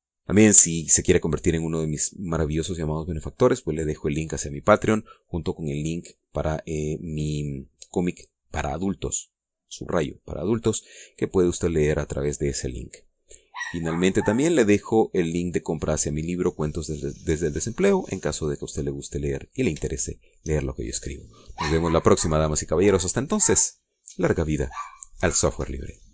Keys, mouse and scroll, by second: 20.2 scroll down 1, 21.0 shift+middle click, 21.7-23.5 shift+middle drag.